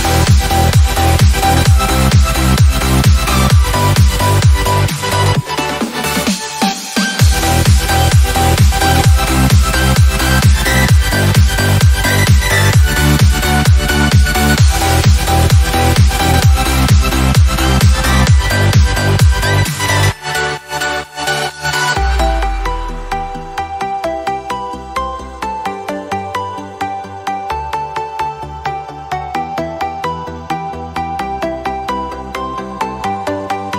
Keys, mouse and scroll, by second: 1.7 ctrl+v, 2.4 click, 7.0 click, 10.0 click, 22.4 ctrl+c, 24.8 ctrl+click, 25.8 click, 31.4 ctrl+v, 32.3 Return.